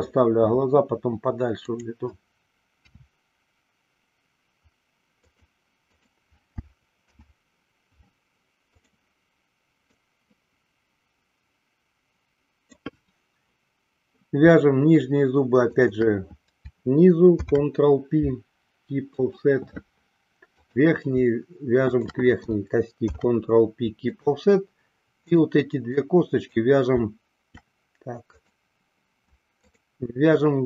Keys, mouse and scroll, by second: 3.2 e, 5.6 click, 6.0 click, 7.3 alt+p, 10.3-13.1 drag, 15.8 shift+click, 17.5 ctrl+p, 20.7 click, 22.1 shift+click, 23.2 ctrl+p, 25.3 click, 26.0 click, 28.4 click, 29.7 shift+click.